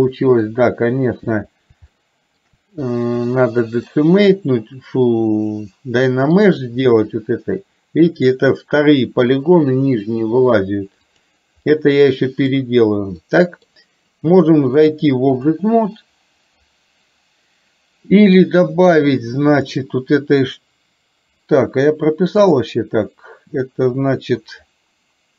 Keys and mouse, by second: 2.0-2.4 shift+middle drag, 3.9-6.5 middle drag, 11.1 click, 11.8-12.6 middle drag, 13.4 middle click, 15.0-15.5 drag, 19.6 click, 22.5-24.4 drag.